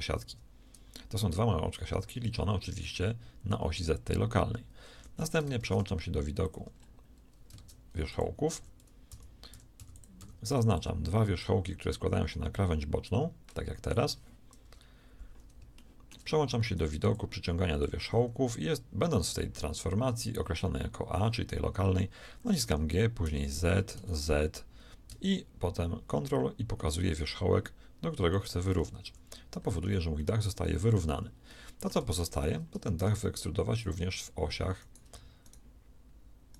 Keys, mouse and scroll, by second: 4.9 a, 5.5 ctrl+Tab, 7.5 ctrl+Tab, 8.4-10.4 typing, 14.6 KP_1, 22.6 g, 29.0 a, 29.9 z, 33.0 ctrl+Tab.